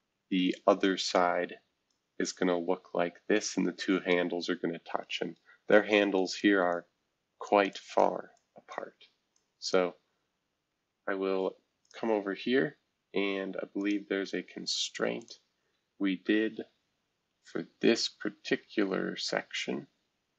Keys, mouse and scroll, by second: 0.4 shift+F2, 1.8-5.3 drag, 6.1 click, 6.7 click, 7.7 click, 8.3 click, 9.3 click, 10.8 shift+F2, 11.8 click, 12.2-13.3 scroll up 1, 13.3-13.8 scroll up 1, 13.8-16.5 drag, 16.5-17.9 Down, 17.2 Down, 18.7 Down, 19.0 Down, 19.8 Down.